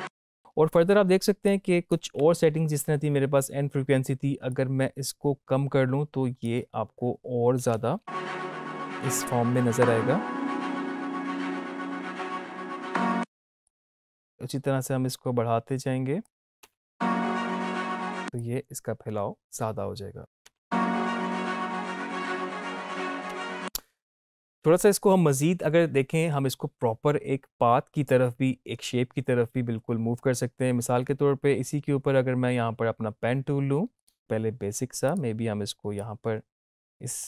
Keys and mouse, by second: 1.7-4.2 drag, 4.4-7.7 drag, 7.7 space, 12.8 space, 14.0-16.6 drag, 16.6 space, 18.4-20.2 drag, 20.2 ctrl+z, 20.4 space, 23.3 space, 33.9 click, 34.2 ctrl+z, 35.0-37.2 drag.